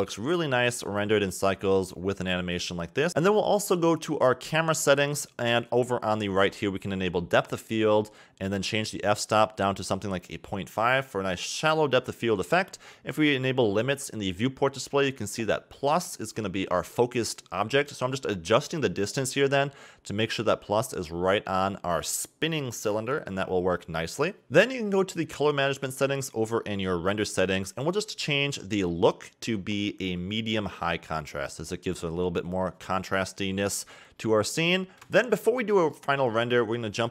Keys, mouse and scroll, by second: 0.0-1.0 middle drag, 1.0-1.8 shift+scroll down 6, 1.8-2.7 scroll up 2, 3.3 click, 4.5 click, 6.6 click, 7.9-9.7 drag, 10.1-11.7 scroll down 12, 11.7-13.9 drag, 13.9-15.3 scroll down 2, 15.3 click, 16.2 click, 16.8 scroll down 2, 17.1-18.5 middle drag, 18.5-19.1 scroll down 2, 19.1-23.1 drag, 23.4-24.9 middle drag, 24.9-26.8 drag, 26.8-27.5 scroll down 13, 29.8-32.9 drag, 35.5 click, 36.1-37.0 scroll down 1, 37.0 click.